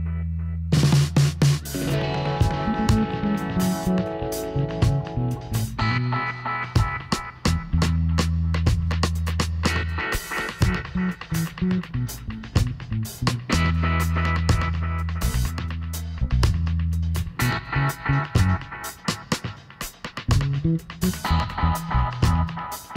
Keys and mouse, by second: 1.9-4.5 right drag, 4.5 middle click, 4.9-6.2 drag, 7.7-10.5 middle drag, 12.9 h, 13.2 middle click, 16.2 middle click, 17.2 click, 17.9 middle click, 19.8 middle click, 20.3-21.6 drag.